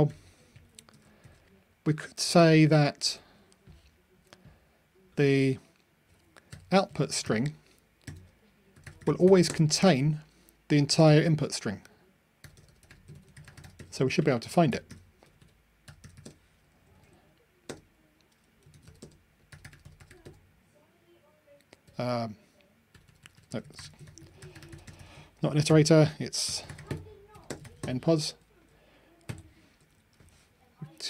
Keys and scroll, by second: 0.9 super+v, 5.3 super+z, 29.3 super+F9.